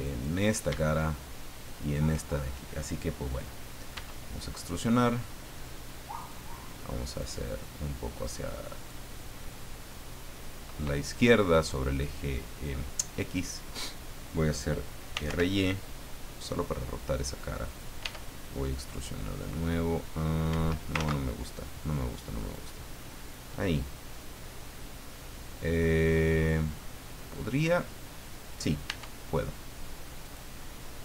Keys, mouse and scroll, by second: 0.0 right click, 3.9 e, 6.2 click, 7.2-9.0 drag, 9.1-10.5 middle drag, 14.8-15.7 typing, 17.6 click, 20.5 Escape, 20.9 ctrl+z, 22.5 click, 23.6-26.9 middle drag, 28.8 e, 30.2 click.